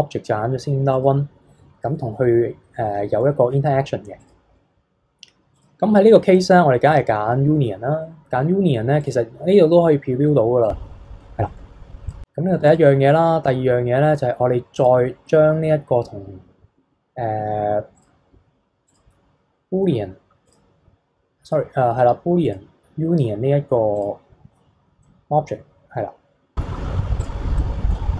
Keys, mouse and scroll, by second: 1.8-2.9 middle drag, 2.9 scroll up 1, 3.2-4.2 middle drag, 4.2 click, 5.5-6.9 drag, 6.9-9.0 middle drag, 9.0 click, 9.5-11.8 middle drag, 11.8 scroll down 1, 12.1 click, 12.7 click, 14.7 click, 17.9-19.6 drag, 19.6-20.4 scroll down 5, 20.4-22.5 drag, 24.7 scroll down 1, 25.0-27.2 middle drag, 27.2 click, 27.6-28.1 middle drag.